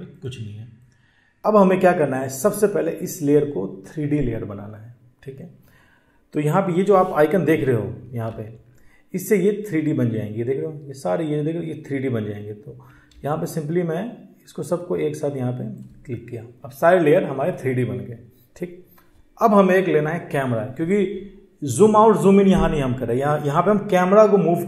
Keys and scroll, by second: 6.4 ctrl+1, 6.5 ctrl+1, 11.4 ctrl+1, 11.5 ctrl+1.